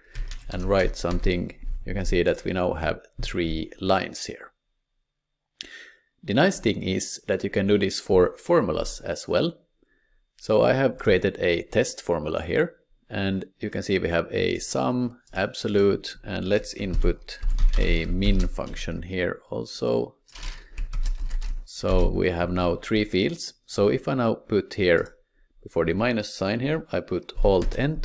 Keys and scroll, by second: 0.0-1.6 typing, 3.9 typing, 5.5 typing, 16.8-18.7 typing, 20.8 typing, 21.1 Return.